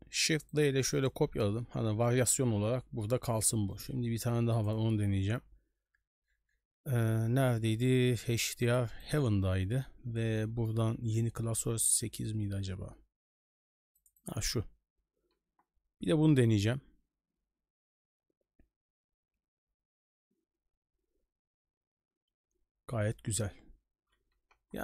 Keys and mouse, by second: 1.0 middle click, 3.2 middle click, 3.8-24.8 right drag.